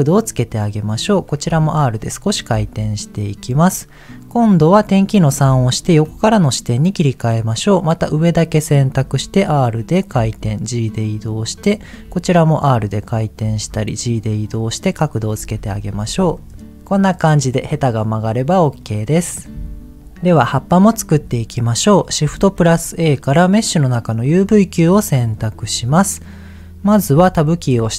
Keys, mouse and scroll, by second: 0.4 click, 1.4 r, 2.3 click, 2.5 g, 3.1 click, 5.4 KP_3, 7.2 click, 9.0 r, 10.0 click, 10.1 g, 11.0 click, 11.5 click, 12.0 r, 12.9 click, 13.4 g, 14.1 click, 15.5 Tab, 15.8 click, 16.0 middle click, 16.6-18.1 middle drag, 18.2-18.7 scroll down 2, 18.7 middle click, 20.0 shift+middle click, 21.7 click, 22.3 shift+a, 24.8-26.6 scroll down 7, 27.4 Tab, 27.7-27.9 scroll up 2.